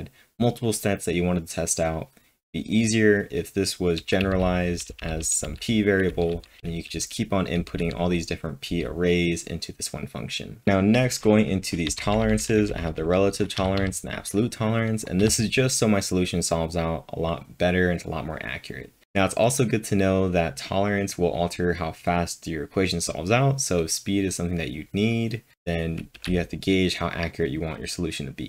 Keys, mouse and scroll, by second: 4.2 typing, 6.3-7.8 typing, 11.9-13.8 typing, 15.2 w, 26.2 j.